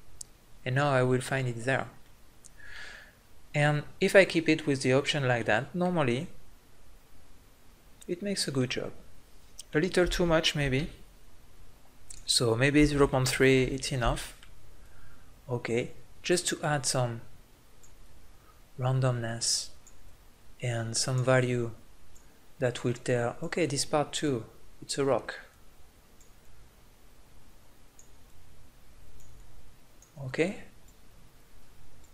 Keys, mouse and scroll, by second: 2.0-6.2 middle drag, 6.2-8.6 drag, 8.6 middle click, 10.6 ctrl+z, 14.8-19.9 drag, 20.0-28.0 drag.